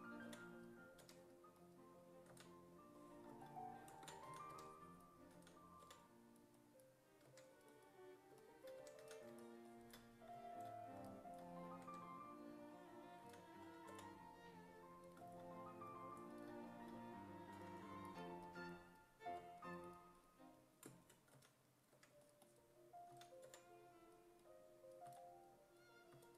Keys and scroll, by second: 0.3 5, 1.0 1, 2.3 s, 4.0 ctrl+z, 4.1-5.8 typing, 7.3 1, 8.6-9.5 typing, 11.9 1, 13.3 s, 13.9 5, 17.6 2, 19.4 2, 21.4 s, 22.0 1, 23.1 s, 23.5 5, 25.1 s, 26.2 s.